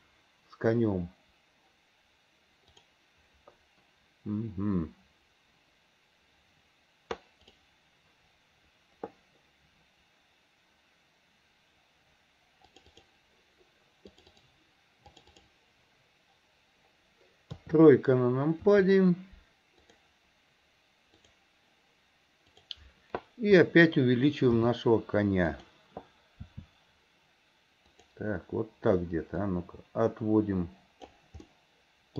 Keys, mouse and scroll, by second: 29.5 click, 31.5-32.1 scroll up 1.